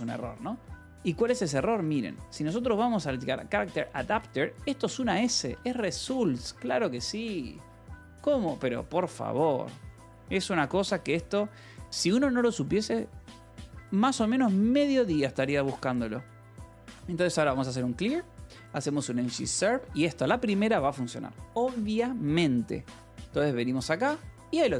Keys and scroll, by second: 1.0-6.8 typing, 2.8 Return, 5.0 Escape, 8.5-11.6 typing, 12.2 ctrl+s, 16.3-20.4 typing.